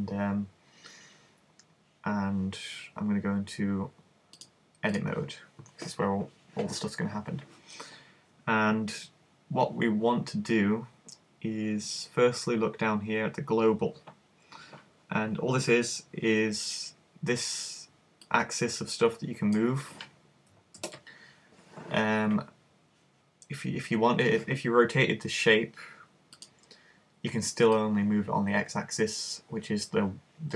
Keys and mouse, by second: 5.1 click, 18.3 click, 20.8 super+z, 25.1 r, 26.5-29.7 drag.